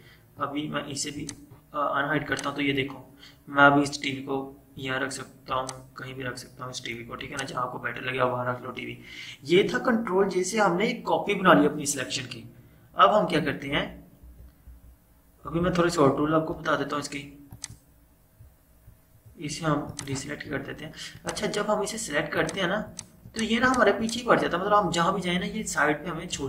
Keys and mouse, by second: 13.5 click, 13.8 ctrl+z, 14.8 ctrl+z, 17.7 click, 21.8 click.